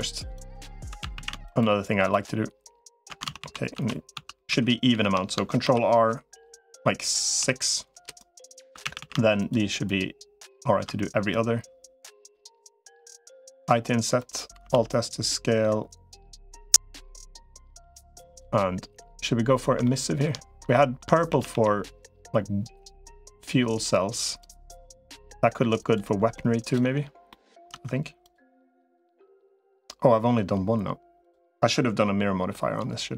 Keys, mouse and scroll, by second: 0.8 ctrl+r, 0.8 3, 0.8 a, 1.0 a, 1.2 alt+shift+click, 3.2 ctrl+z, 3.6 ctrl+z, 4.0 ctrl+z, 4.4 ctrl+z, 4.8 ctrl+z, 5.4 ctrl+r, 8.6 3, 8.6 a, 8.8 a, 12.1 middle click, 13.4 i, 14.6 alt+s, 19.8 shift+middle click, 20.6 shift+middle click, 21.2 a, 21.4 g, 25.0 g, 26.4 click, 26.6 Tab, 27.1 middle click, 27.6 Tab, 28.0 click, 31.0 click.